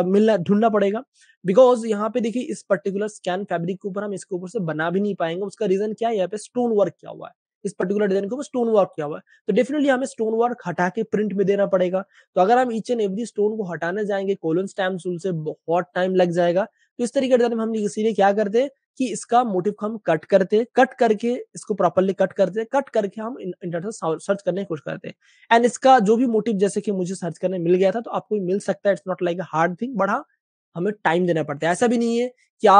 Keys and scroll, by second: 0.1 space, 0.2 space, 0.3 space, 1.3 super+space, 1.8 super+space, 3.0 space, 19.2 super+space, 31.8 Page_Up.